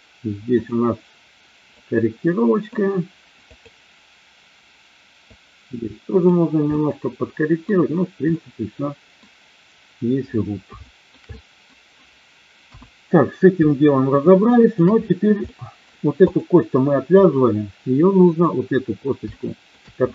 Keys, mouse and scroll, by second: 0.5 click, 1.8 click, 5.3-6.3 drag, 6.7-7.7 middle drag, 8.3 middle click, 10.9 shift+middle click, 11.3 middle click, 12.5 KP_1, 13.7-14.8 shift+middle drag, 15.5 middle click, 16.3 click, 18.2 click, 19.3 shift+middle click.